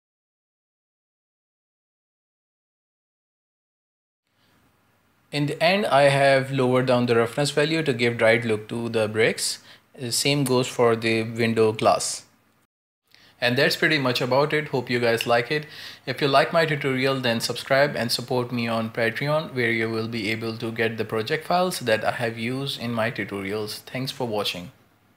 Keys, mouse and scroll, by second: 0.4 click, 0.6 right click, 0.7 f, 0.8 middle click, 0.9 f, 1.4 middle click, 1.7 right click, 1.8 shift+middle click, 1.9 f, 2.4 scroll down 3, 2.5 middle click, 2.6 Tab, 2.7 shift+middle drag, 2.9 scroll up 2, 3.0 shift+middle click, 3.4 right click, 3.4 shift+middle click, 3.5 Tab, 3.7-4.3 scroll down 2, 3.9 a, 4.3 j, 4.4 k, 6.0 scroll up 1, 6.2 click, 6.4-10.1 typing, 7.7 shift+middle click, 7.8-8.5 scroll up 2, 8.0 shift+middle click, 8.5 click, 8.8 right click, 9.1 middle click, 9.2 ctrl+z, 9.4 right click, 9.9 right click, 10.0 right click, 10.2 shift+middle click, 10.8 right click, 11.2-12.4 typing, 11.8 ctrl+z, 12.3 right click, 12.4 scroll down 3, 12.5 middle click, 12.5 Tab, 12.7-13.7 shift+middle drag, 13.7 right click, 13.8 right click, 14.0 shift+middle click, 14.1 scroll up 1, 14.2 scroll down 1, 14.3-16.5 typing, 14.4 shift+middle click, 14.9 right click, 15.9 right click, 16.0 scroll up 3, 16.3 right click, 16.7 Tab, 16.8 middle drag, 17.0 scroll down 1, 17.2 middle click, 17.4 ctrl+space, 17.5 scroll up 2, 17.8 right click, 17.9-18.5 scroll down 1, 18.5 scroll down 5, 18.8 scroll up 6, 19.1 click, 19.5 scroll up 7, 19.6 click, 19.9-20.2 scroll down 4, 20.9 click, 21.1 scroll up 11, 21.4-21.8 scroll down 2, 21.8-22.6 drag, 22.6-22.9 scroll up 12, 23.0-23.4 scroll down 8, 23.4 click, 24.0 scroll down 1, 24.3 ctrl+space, 24.4 shift+middle click.